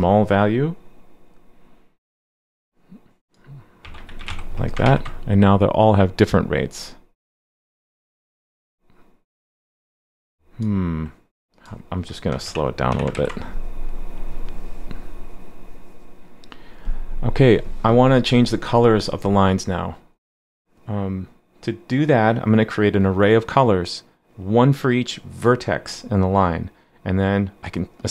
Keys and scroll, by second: 4.8 super+s, 13.1 super+s.